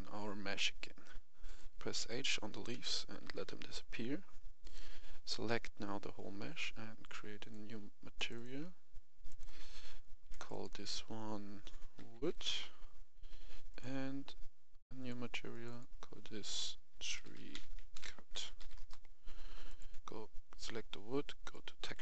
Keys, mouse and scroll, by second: 0.5 middle click, 1.4 right click, 1.9 scroll down 1, 2.2-2.7 scroll up 1, 2.7 KP_1, 3.9 KP_1, 4.6-5.6 right drag, 7.3 click, 11.9-12.4 typing, 12.4 Return, 13.6 click, 17.0-18.5 typing, 18.7 Return, 21.9-22.0 drag.